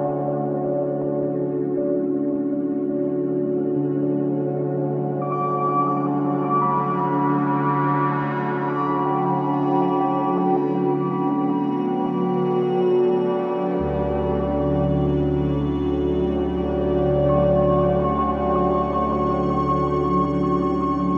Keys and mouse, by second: 0.5 click, 1.6-3.0 drag, 4.3-5.3 drag, 5.7-9.1 alt+drag, 9.1-9.5 typing, 13.4 shift+drag, 14.0 alt+click, 14.9 typing, 16.3 click, 17.3 alt+click, 18.1 ctrl+s, 18.4-21.1 alt+middle drag.